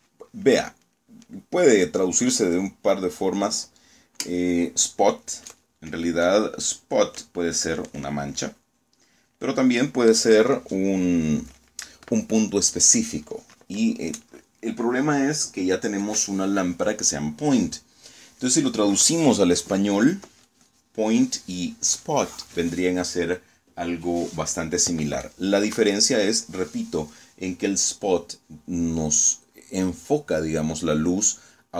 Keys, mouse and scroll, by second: 22.9-23.3 scroll down 2.